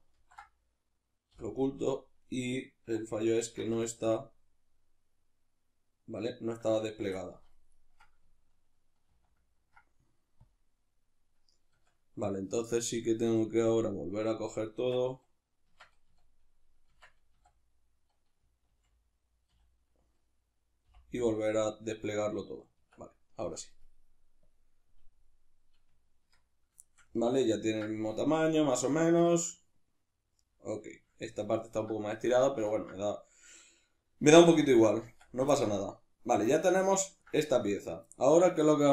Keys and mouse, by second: 1.3 h, 2.9 2, 3.4 alt+right click, 3.8-7.7 shift+middle drag, 7.7 alt+shift+right click, 9.1 ctrl+e, 11.7 Tab, 13.6 click, 14.8 Tab, 16.1 a, 16.9 Tab, 17.4 a, 22.8 Tab, 23.8 click, 24.4 click, 25.9 Tab, 26.8-37.4 shift+middle drag, 35.0 Tab, 37.4 right click.